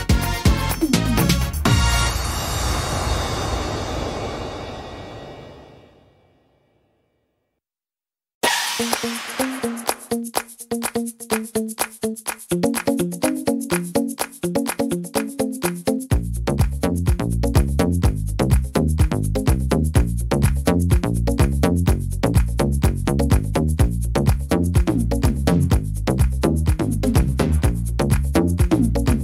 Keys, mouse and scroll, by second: 0.0 middle click, 0.4 scroll down 2, 1.5 click, 3.6 middle click, 4.5 shift+middle click, 4.9 scroll up 2, 5.7 ctrl+r, 9.0 middle click, 9.0 s, 12.0 ctrl+r, 14.6 middle click, 14.6 s, 15.2 scroll down 2, 15.5 middle click, 16.3-16.8 scroll down 3, 16.9 middle click, 17.7-18.5 scroll up 8, 18.3 middle click, 19.5 ctrl+r, 20.6 ctrl+r, 22.7 alt+shift+right click, 23.9 s, 25.4 middle click, 25.8 scroll down 1, 27.2 click.